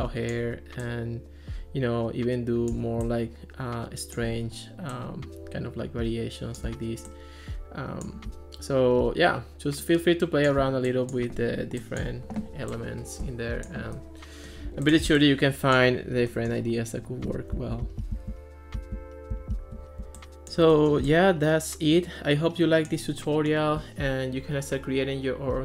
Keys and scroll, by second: 17.6 super+z.